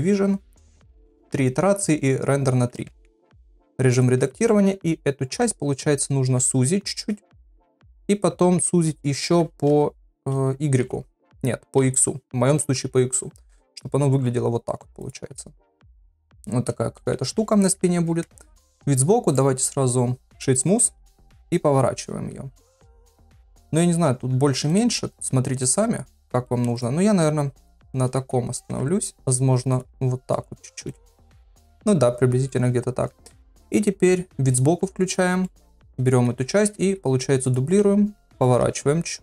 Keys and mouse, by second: 0.9 click, 2.9 Tab, 3.8 3, 7.8 middle click, 15.3-16.4 middle drag, 17.0 Tab, 18.2 KP_3, 19.4-20.4 right drag, 21.3 r, 23.4 s, 23.9 r, 25.6 middle click, 27.6 KP_1, 28.7 KP_3, 29.2 r, 29.9 g, 31.3 click, 31.7 middle click, 33.1 KP_1, 34.1 KP_3, 35.4 shift+middle click, 36.6 shift+d, 37.8 r, 38.6 g.